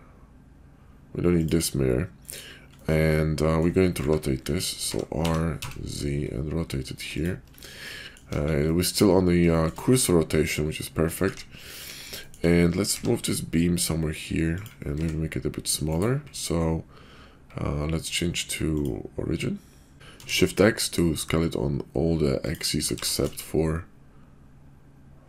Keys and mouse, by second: 2.7-3.6 middle drag, 4.9 e, 5.2 r, 7.8-8.2 middle drag, 8.3 KP_5, 8.6-9.0 middle drag, 9.9-10.7 middle drag, 11.3 `, 11.8 KP_5, 12.2 shift+middle click, 12.8 g, 14.9 s, 18.7-19.9 drag, 19.9 s, 22.8 g.